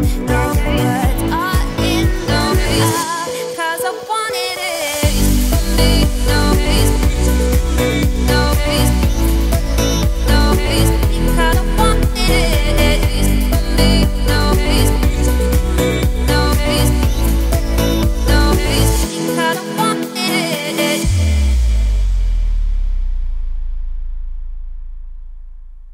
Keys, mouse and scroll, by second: 0.2 1, 0.5 click, 1.5 ctrl+b, 3.1 click, 3.4 g, 4.4 click, 4.7 g, 5.4 scroll down 2, 5.5-6.8 middle drag, 6.8 Tab, 7.0 scroll down 3, 7.1 middle click, 7.5-8.0 scroll up 4, 8.1-8.4 scroll down 2, 8.4-9.7 middle drag, 9.7 scroll up 2, 9.9 Tab, 10.6 a, 11.0 `, 11.6-12.0 scroll up 4, 11.7 middle click, 12.6 r, 13.5 g, 14.8 z, 15.1-15.4 scroll down 4, 15.4 scroll up 2, 15.6 Tab, 15.9 scroll down 2, 16.2-17.1 middle drag, 17.1 /, 17.5-17.8 scroll down 2, 17.8-19.1 scroll up 1, 19.1-21.9 drag, 21.9 scroll down 2, 22.0-22.4 middle drag, 22.4 ctrl+s, 23.5-24.3 scroll up 2, 25.3 shift+middle drag, 25.5-25.9 scroll up 2.